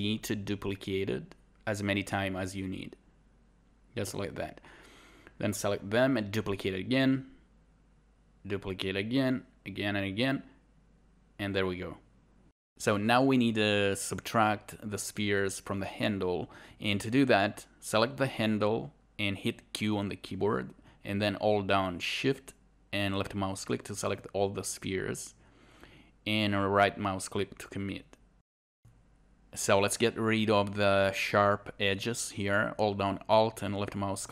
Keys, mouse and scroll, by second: 0.4 click, 1.5 click, 3.1 click, 3.7 right click, 4.0 shift+y, 5.1 shift+d, 5.2 click, 6.3 right click, 6.9 Delete, 9.9 right click, 10.6 shift+Delete, 10.7 scroll up 1, 10.9 scroll down 1, 11.1 alt+right click, 11.3 alt+right click, 12.2 alt+click, 19.1 alt+right click, 22.2 scroll up 1, 22.8 click, 23.8 shift+click, 24.1 shift+click, 24.4 shift+click, 24.7 shift+click, 25.3 shift+click, 25.8 shift+click, 26.1 shift+click, 26.3 shift+click, 26.6 shift+click, 26.8 shift+click, 27.0 shift+click, 27.3 shift+click, 27.6 shift+click, 28.6 right click, 29.1 alt+click, 29.6 alt+right click, 30.8 alt+right click, 31.1 alt+click.